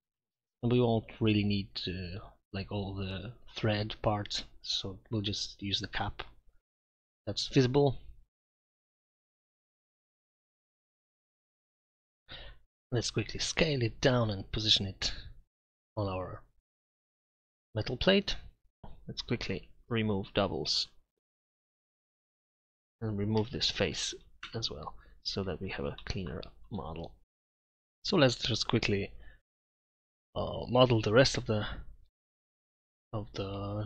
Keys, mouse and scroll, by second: 0.1-0.5 ctrl+KP_Add, 0.7 ctrl+KP_Subtract, 0.9 Delete, 2.9 ctrl+KP_Add, 3.9 Delete, 4.2 Tab, 4.4 Tab, 4.7 ctrl+KP_Add, 4.8 ctrl+KP_Add, 4.9 Delete, 5.1 Tab, 6.4 shift+z, 7.2 z, 12.6 KP_Divide, 13.2 s, 14.5 KP_Divide, 15.2 r, 16.9-18.2 typing, 17.8 Tab, 19.5 w, 21.3 Tab, 22.1 Tab, 23.4 Delete, 24.5 Tab, 25.5 z, 26.7-27.4 drag, 28.2-30.2 typing, 31.7 click.